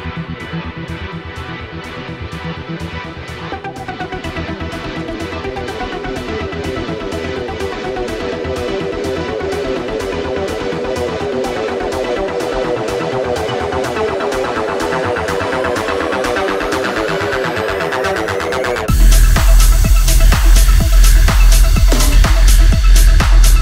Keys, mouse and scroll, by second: 0.4 Delete, 1.4 middle click, 2.0 click, 2.3 Delete, 3.0 middle click, 4.2 2, 4.5 click, 6.9 middle click, 8.1 f, 9.6 click, 11.8-16.0 middle drag, 16.2 z, 16.6 z, 18.6 click, 19.6 click, 20.3 click, 23.0 Escape.